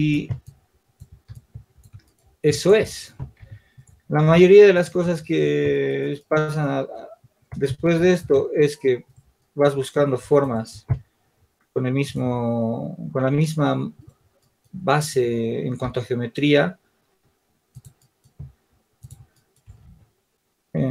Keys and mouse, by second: 1.3-6.7 drag, 1.3-3.0 right drag, 4.1 Tab, 8.4 shift+d, 10.4-11.7 drag, 14.4-20.9 drag, 15.7 s, 20.2 shift+d.